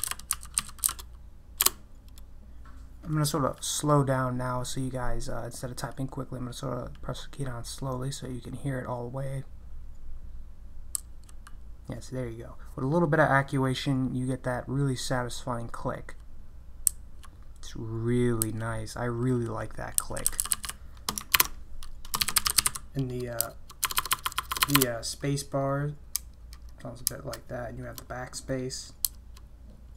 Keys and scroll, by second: 0.0-1.3 typing, 1.6 Return, 10.9 typing, 16.9 k, 20.0-20.5 typing, 21.3 ctrl+BackSpace, 22.0-24.7 typing, 26.1 space, 27.1 space, 29.0 BackSpace.